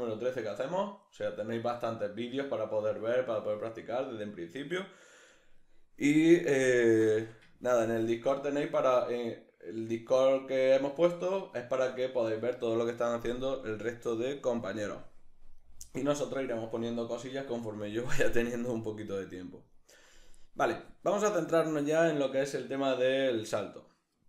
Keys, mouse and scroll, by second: 14.9-15.6 drag, 15.6-17.9 right drag, 17.9 alt+q.